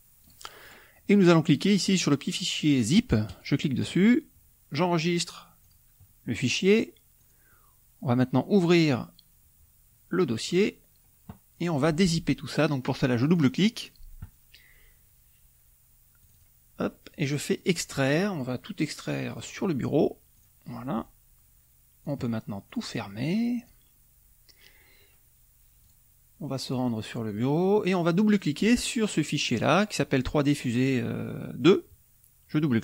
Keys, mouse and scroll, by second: 0.1 click, 3.2 click, 5.6 click, 7.2 click, 8.7 click, 10.5 click, 13.2 click, 16.2 click, 17.6 click, 19.3 click, 20.3 click, 22.0 click, 22.7 click, 23.6 click, 25.8 click, 27.3 click, 28.3 click.